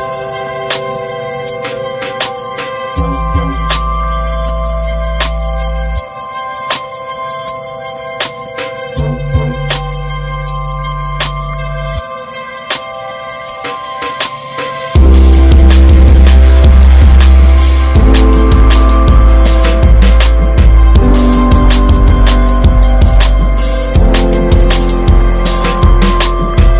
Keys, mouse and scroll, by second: 1.3 Tab, 1.4 scroll down 1, 1.5 middle click, 1.9 Tab, 2.1 middle click, 2.3 scroll up 2, 2.5-3.7 shift+middle drag, 3.7 ctrl+r, 4.5 middle click, 4.9 ctrl+b, 6.8 Tab, 6.9 drag, 7.1 scroll down 4, 7.3 middle click, 7.9 ctrl+s, 8.1 drag, 8.3-9.1 shift+middle drag, 9.1 ctrl+s, 9.2 ctrl+drag, 9.4 middle drag, 9.5 scroll up 1, 9.7 scroll down 2, 9.8-10.1 shift+middle drag, 10.3 alt+middle click, 10.7 scroll down 3, 11.0 ctrl+s, 11.2 alt+middle click, 11.5 click, 11.7 scroll down 2, 12.0 shift+middle click, 12.1 scroll up 3, 12.4 ctrl+s, 12.5 middle drag, 12.7-13.2 scroll up 4, 12.8 Tab, 13.3 shift+middle click, 13.8 scroll up 1, 15.0 click, 16.6 click, 17.7 ctrl+r, 19.0-20.7 middle drag, 20.7 scroll up 2, 21.3 Tab, 21.7 Tab, 21.9 click, 22.4 alt+z, 23.1 alt+z, 23.3 middle click, 23.9 ctrl+z, 24.5 Tab, 25.3 ctrl+z, 26.5 ctrl+r.